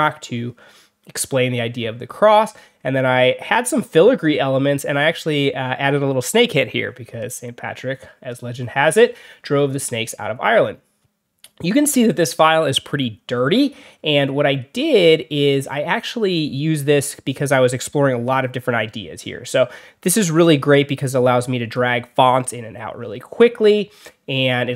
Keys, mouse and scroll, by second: 2.7 alt+scroll up 2, 3.6-4.0 alt+scroll down 4, 5.0-5.4 alt+scroll up 4, 7.0 alt+scroll down 2, 10.5 alt+scroll down 2, 11.3 alt+scroll down 2, 12.5 alt+scroll up 2, 13.1 alt+scroll up 2, 20.3-21.6 drag, 23.9 alt+scroll down 2, 24.3-24.7 alt+scroll up 4.